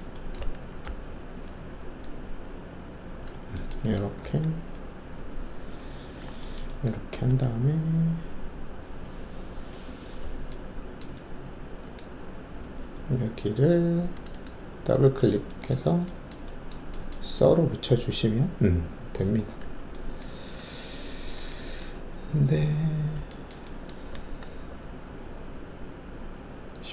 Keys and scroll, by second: 0.8 alt+e, 4.2 alt+w, 7.1 alt+2, 12.6 alt+2, 20.3 alt+2.